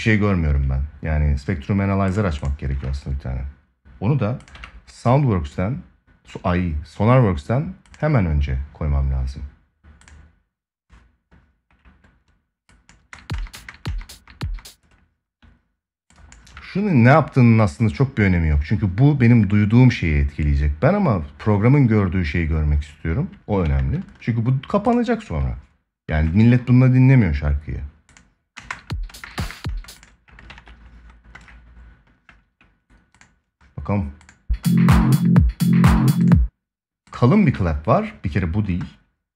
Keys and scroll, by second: 12.7 space, 23.3 ctrl+s, 28.3 space, 30.2 ctrl+s.